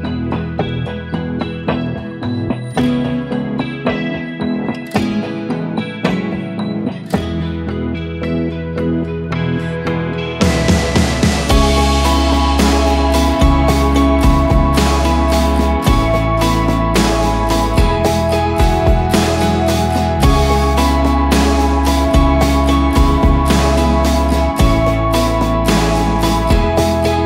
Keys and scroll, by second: 3.3 F3, 4.4 Escape, 5.0 F2, 10.8 ctrl+k, 11.3 space, 11.5 Escape, 14.5 F3, 15.4 Escape, 19.6 ctrl+r, 23.8 ctrl+r, 25.0 ctrl+r.